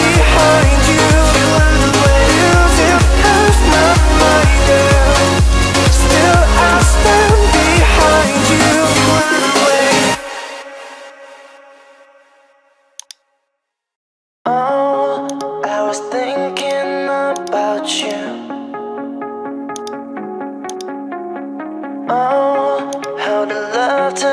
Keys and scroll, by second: 13.5 0.